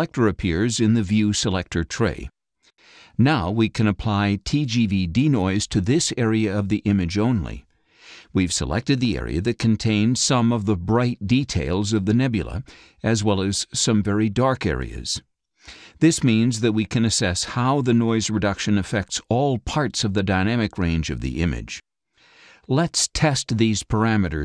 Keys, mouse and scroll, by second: 1.3 click, 3.1-3.4 scroll down 3, 3.8 scroll down 2, 4.8 click, 6.4-7.5 drag, 20.4-22.9 drag.